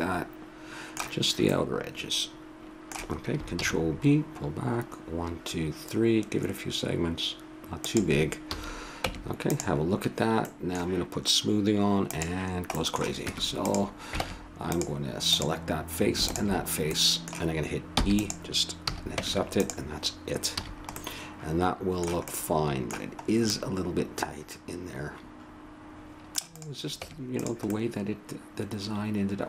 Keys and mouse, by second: 0.0-1.0 middle drag, 3.5 ctrl+b, 8.5 a, 9.1 Tab, 10.1-12.1 middle drag, 12.1 click, 13.2 Tab, 14.2 ctrl+Tab, 15.3 click, 17.0 middle click, 18.0 e, 18.9 a, 19.2 Tab, 20.6 a, 24.2-25.3 middle drag, 26.5 click, 26.9 Tab, 27.7-28.9 middle drag.